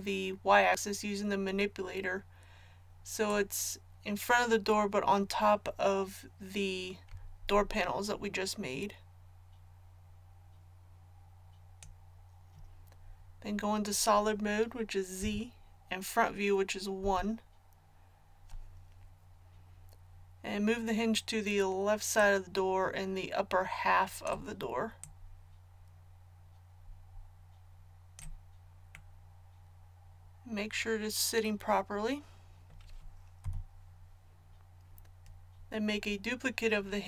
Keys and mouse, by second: 3.3-15.2 drag, 15.2 z, 17.0 KP_1, 22.2-33.4 drag, 33.4 KP_1.